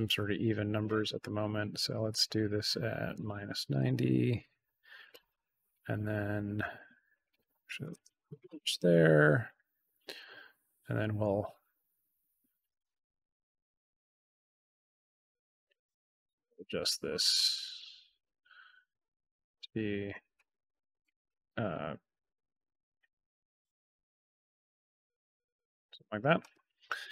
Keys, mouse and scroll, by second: 2.0 click, 5.0-6.7 drag, 7.1 click, 8.4 middle click, 8.4 scroll, 10.1-15.1 drag, 15.8-17.7 drag, 18.2-21.0 drag, 23.6-26.1 drag.